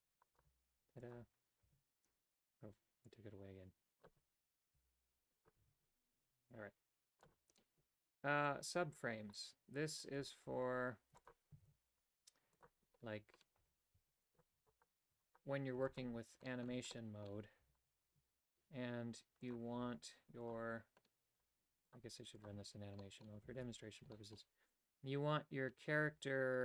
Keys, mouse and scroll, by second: 0.3 right click, 0.5 g, 1.6 a, 3.1-4.1 drag, 4.6 right click, 4.8 g, 5.6 a, 6.5 click, 10.0 right click, 10.5 Tab, 11.0 x, 11.6 shift+a, 13.6 Tab, 13.9 w, 14.5 w, 15.1 w, 15.7 w, 16.5 shift+middle click, 16.9 middle click, 17.2-17.6 scroll down 1, 17.6 a, 18.0 alt+right click, 19.5 click, 20.4 click, 21.9 click, 22.5 click, 23.0 middle click, 23.6 shift+space, 24.1 shift+middle click.